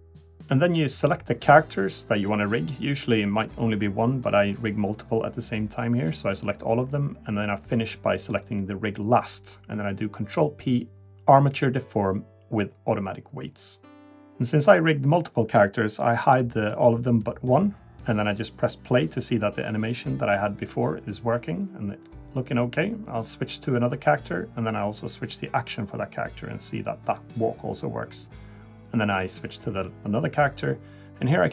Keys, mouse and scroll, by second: 0.6 click, 2.0 click, 2.9 ctrl+click, 3.7 ctrl+click, 4.5 click, 5.0 ctrl+click, 5.4 ctrl+click, 6.7 ctrl+click, 8.9 ctrl+p, 13.1 click, 14.2 click, 15.2 click, 15.9 click, 16.1 click, 16.3 scroll up 2, 16.6 middle click, 17.2 click, 21.0 click, 21.9 click, 22.4 click, 23.0 click, 27.2 click, 29.4 click.